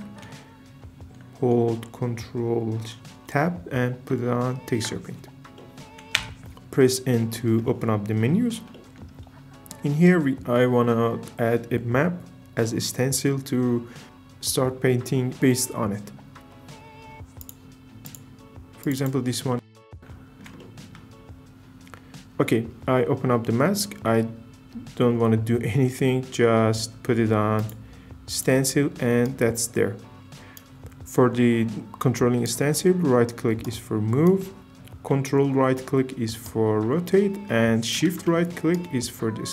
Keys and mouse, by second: 0.2 ctrl+Tab, 6.2 n, 26.4 middle click, 27.6-28.4 drag.